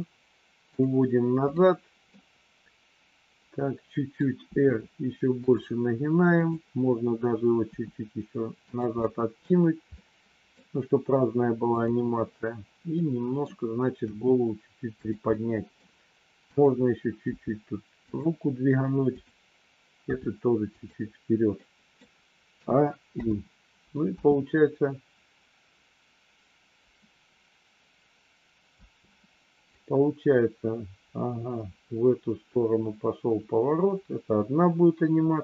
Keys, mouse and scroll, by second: 1.4 click, 2.1-4.1 middle drag, 4.4 r, 6.4 click, 7.6 r, 8.9 middle click, 9.9 middle click, 12.9 middle click, 14.0 r, 15.3 middle click, 16.4 click, 17.3 g, 19.1 click, 20.0 g, 21.5 scroll up 1, 21.6 middle click, 22.5 a, 23.0 i, 24.1 space, 28.8 space, 29.6-35.4 drag.